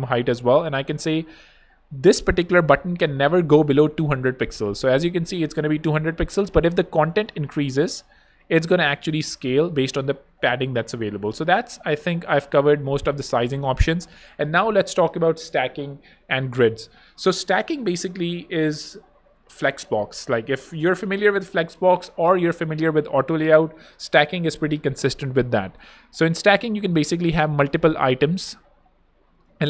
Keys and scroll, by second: 2.8-3.7 typing, 7.6-9.7 typing, 12.1 super+z, 12.8 super+z, 26.9 super+d, 28.0 super+z.